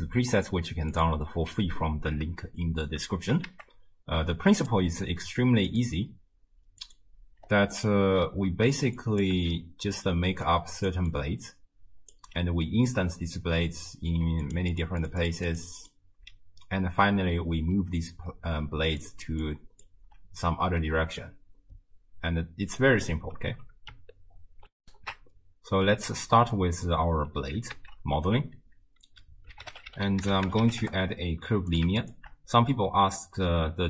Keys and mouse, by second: 3.5 shift+a, 5.8 click, 6.9 click, 9.0 click, 9.4 x, 10.1-11.1 d, 10.5 click, 11.1-12.2 drag, 12.2 d, 12.2 d, 12.4 d, 13.6-16.2 typing, 14.4 click, 14.7 click, 15.0 click, 15.2 click, 15.4 click, 15.6 click, 15.8 click, 17.4-19.0 d, 19.0 click, 19.3 d, 19.4-20.1 d, 19.4 click, 24.8 ctrl+alt+shift+w, 24.9 ctrl+alt+shift+q, 27.8 ctrl+a, 32.0 alt+shift+click.